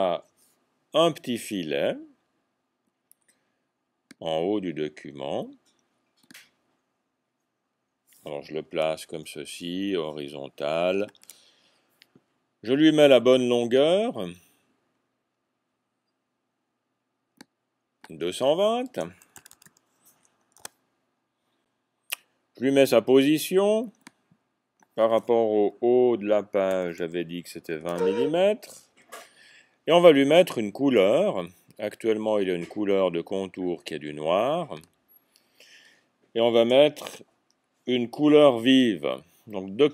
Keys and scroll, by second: 19.4 typing, 20.4 Tab, 26.8 typing, 27.8 Tab, 30.7 typing.